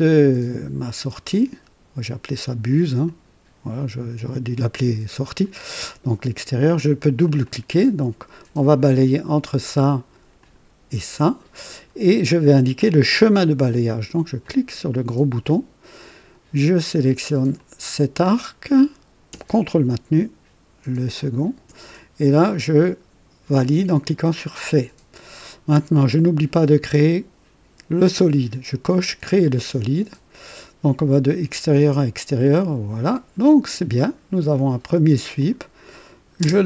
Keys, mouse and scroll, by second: 3.0 click, 7.2 click, 9.1 click, 10.4 click, 14.4 click, 17.5 click, 21.2 ctrl+click, 24.3 click, 28.9 click, 32.4 click, 35.4 click, 36.4 space.